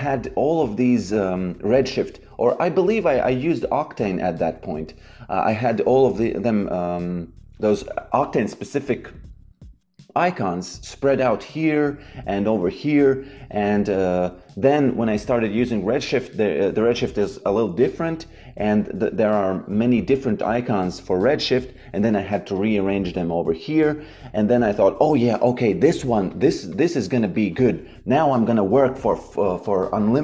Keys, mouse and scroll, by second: 13.8 click, 18.6 click, 22.5 click, 26.2 click.